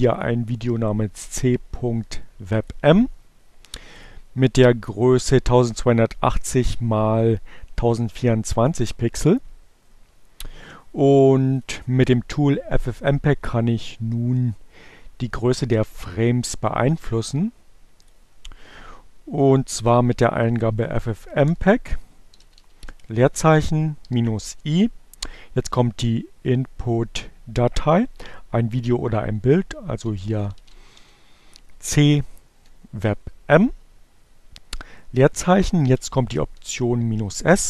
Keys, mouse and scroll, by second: 0.1 click, 0.8-2.4 right drag, 2.4 click, 4.0 click, 8.2 click, 13.5-15.5 drag, 16.0-17.2 drag, 17.9 click, 18.2-19.3 typing, 20.6-23.4 typing, 28.1-29.2 typing, 31.1 m, 33.4 space, 33.7 -, 36.0 s, 36.3 space.